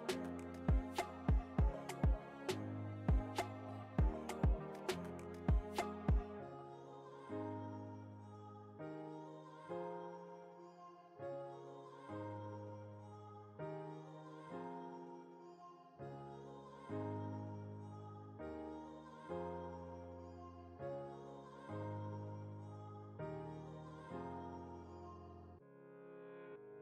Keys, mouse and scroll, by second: 0.3 t, 2.5 click, 4.1-7.0 typing, 8.8 click, 11.9 alt+scroll up 1, 13.1 space, 13.2 click, 13.4 space, 14.4-16.0 drag, 16.0 alt+scroll up 1, 18.5-19.3 typing, 19.3 click, 23.8-26.8 drag, 24.7 typing.